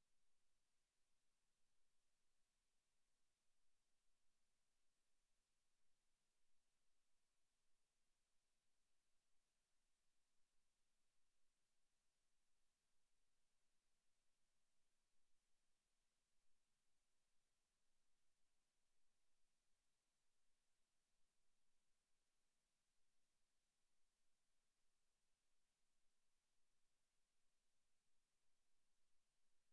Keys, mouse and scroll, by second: 1.2 click, 5.6 scroll up 1, 6.5 right click, 9.5 click, 10.5 click, 15.2 click, 18.3 right click, 19.3 click, 21.4 right click, 22.8 click.